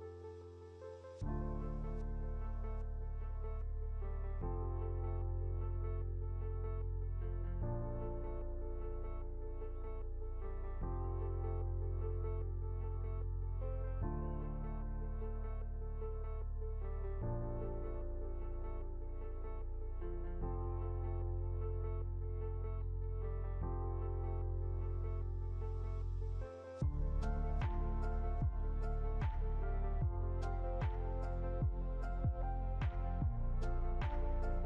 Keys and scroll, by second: 1.5 ctrl+z, 23.8 ctrl+0, 26.5 ctrl+h.